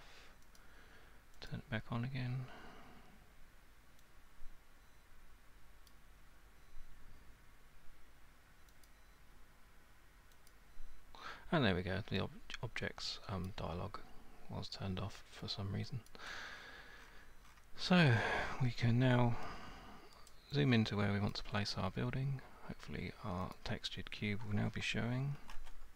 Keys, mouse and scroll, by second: 0.6 click, 1.5 click, 5.9 click, 8.8 click, 10.5 click, 13.5 click, 16.1 click, 16.5-17.6 scroll, 20.3 alt+right click, 21.4 alt+click, 23.5 click, 25.4-25.9 typing.